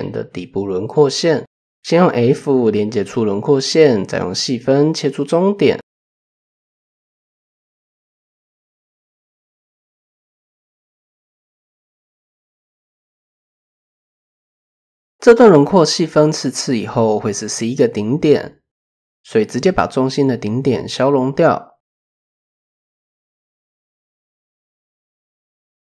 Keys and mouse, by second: 2.0 f, 2.8-3.8 drag, 4.7 KP_3, 5.9-7.7 drag, 8.4 click, 10.4 KP_3, 11.6-12.4 drag, 16.8 click, 18.8 shift+click, 21.5 x, 24.5 shift+click.